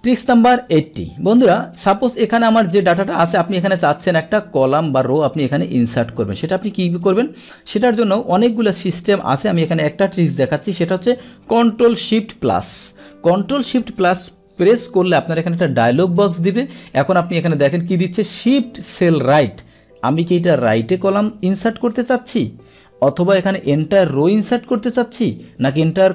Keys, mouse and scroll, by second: 0.1 click, 0.9 click, 2.1 click, 3.4 click, 23.7 click.